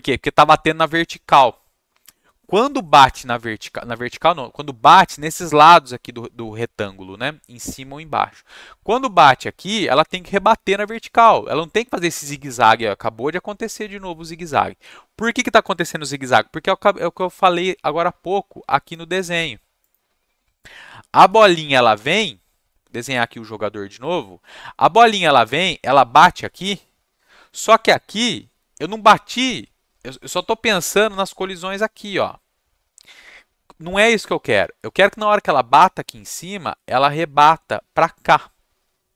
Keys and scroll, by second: 0.0 Up, 0.8 Up, 5.6 Down.